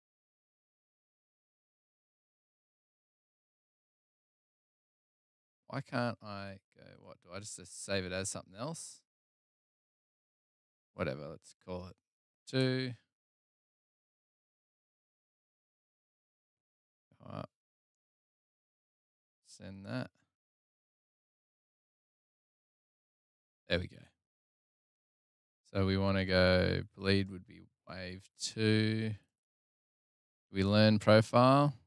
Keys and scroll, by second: 16.9 p.